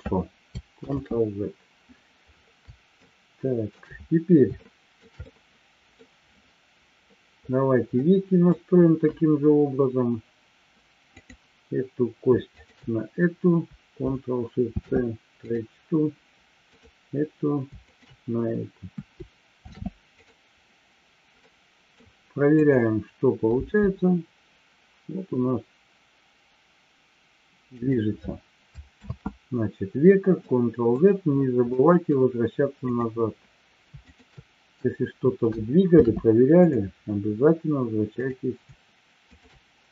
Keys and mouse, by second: 1.2 ctrl+z, 3.0-3.6 middle drag, 4.6 shift+middle drag, 5.2-5.9 middle drag, 8.0 middle click, 11.1-11.9 drag, 14.6 ctrl+shift+c, 16.7-17.3 drag, 17.9 shift+click, 19.5 ctrl+shift+c, 21.3-22.0 middle drag, 22.7 click, 28.1 click, 29.3 ctrl+z, 30.3-31.0 middle drag, 31.6-32.1 middle drag, 32.7-33.5 drag, 34.0 shift+click, 35.9 ctrl+shift+c, 39.2 shift+click.